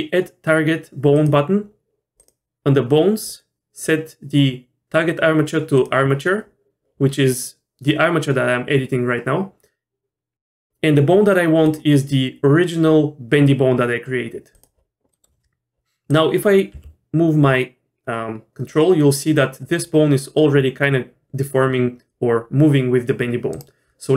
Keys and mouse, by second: 1.1 click, 2.2 click, 3.3-5.8 drag, 11.7-14.6 drag, 15.1 middle click, 16.7 r.